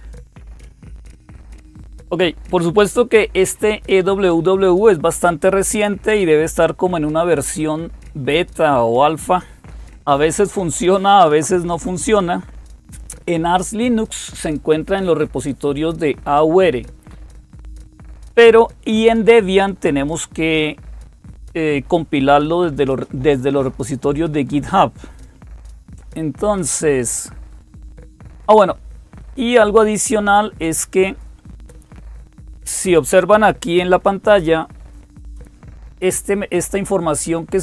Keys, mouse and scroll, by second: 30.8 click.